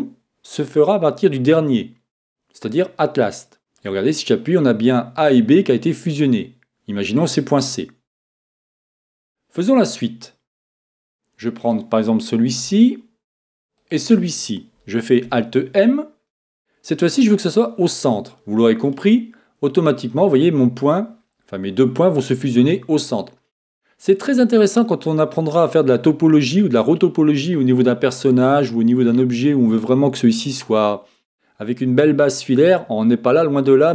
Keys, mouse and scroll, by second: 11.6-13.5 right drag, 13.8-15.7 right drag, 15.2 alt+m.